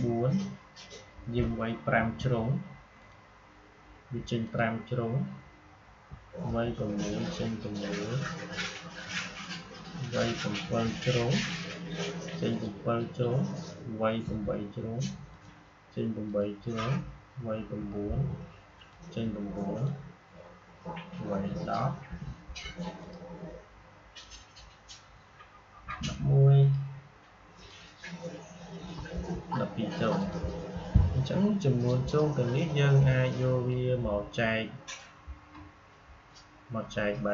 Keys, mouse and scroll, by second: 2.9 click, 6.9 click, 11.4 click, 15.2 click, 18.7 click, 22.9 click, 26.5 click, 30.1-37.3 drag.